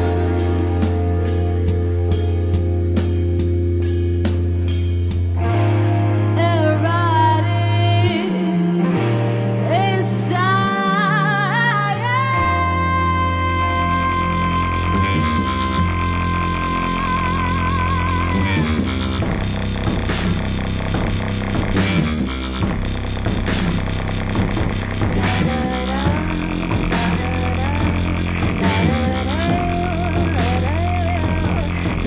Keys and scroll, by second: 3.7 space, 8.2 super+t, 12.1 Return, 13.6 super+d, 19.1 v.